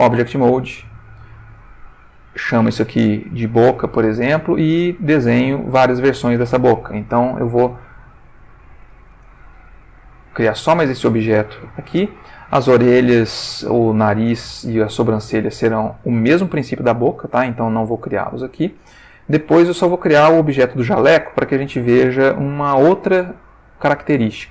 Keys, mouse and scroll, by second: 0.4 Escape, 2.2 click, 2.9 click, 3.4 click, 4.5 click, 5.6 click, 8.5 b, 8.6 o, 8.8 c, 9.1 Return, 10.5 ctrl+middle click, 13.6-14.4 ctrl+middle drag, 17.8-18.5 ctrl+middle drag, 18.6-19.5 ctrl+shift+middle drag, 24.1-24.5 shift+middle drag.